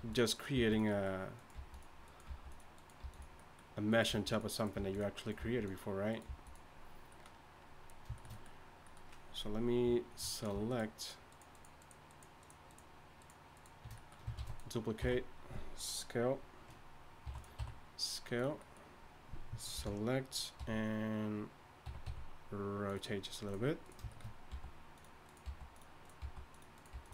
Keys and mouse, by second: 0.0-3.0 typing, 1.0-3.3 drag, 4.1 g, 4.7 g, 5.4 g, 6.2 g, 9.4 click, 10.3 right click, 14.4 shift+d, 15.0 s, 17.2 e, 17.9 s, 19.7 ctrl+l, 20.6 t, 21.9 ctrl+l, 21.9 t, 22.0 r, 24.5 g, 25.4 g, 26.2 g, 26.9 g.